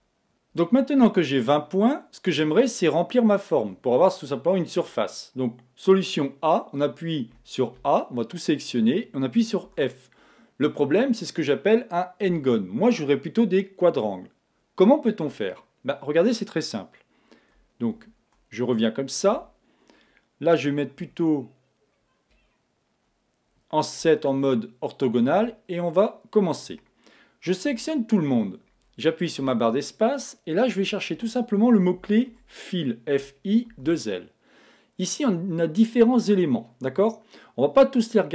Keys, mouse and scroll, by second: 7.3 a, 9.7 f, 17.9 super+z, 19.4 a, 24.2-25.9 middle drag, 27.7 a, 29.4 space, 31.0 BackSpace, 33.8 l.